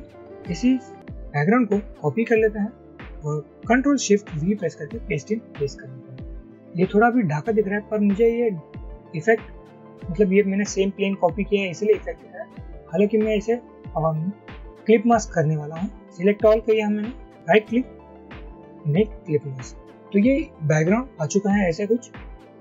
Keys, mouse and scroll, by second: 2.3 ctrl+c, 4.5 ctrl+shift+v, 14.5-15.3 drag, 17.6 right click.